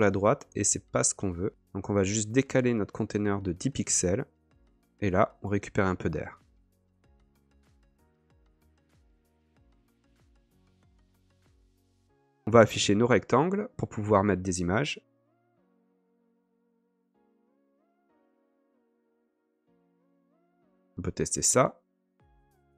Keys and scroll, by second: 15.7 k.